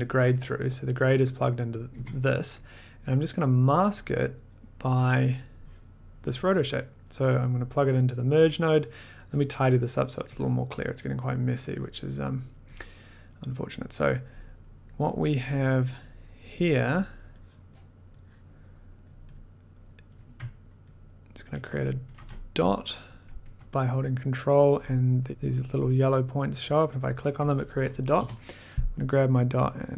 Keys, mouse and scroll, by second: 1.0 click, 1.8 click, 1.9 1, 4.0 click, 4.8 click, 5.0 click, 6.3 click, 7.5 click, 9.5 click, 10.1 middle click, 10.7 click, 11.1 middle click, 11.9 click, 11.9 middle click, 12.8 click, 13.7 click, 14.6 middle click, 15.1 click, 15.1 middle click, 16.0 click, 16.8 click, 17.7 click, 19.0 click, 19.3 click, 19.9 click, 20.2 middle click, 21.1 ctrl+click, 22.1 ctrl+z, 23.1 ctrl+click, 24.3 click, 24.9-25.3 scroll, 25.3 ctrl+click, 27.0 ctrl+click, 27.9 click, 28.8-29.4 ctrl+scroll.